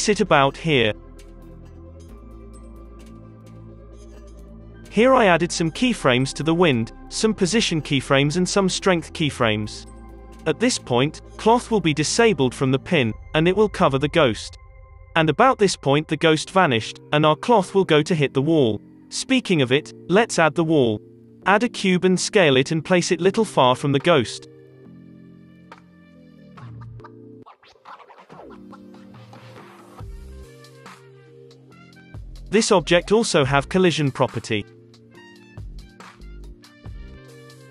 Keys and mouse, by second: 0.7-2.1 drag, 4.2 Delete, 4.5 space, 5.2 middle click, 7.9 middle click, 12.3-15.3 middle drag, 17.4 space, 17.8 Delete, 17.8 Insert, 18.2 shift+a, 19.7 s, 20.7-22.6 typing, 23.9 s, 25.0 g, 25.8 s, 26.3 g, 28.9-32.0 typing, 30.0 middle click, 30.2 ctrl+v, 30.2 Delete, 31.1-32.7 middle drag, 33.0-34.3 drag, 34.3 middle click, 34.3 click, 34.6 alt+a.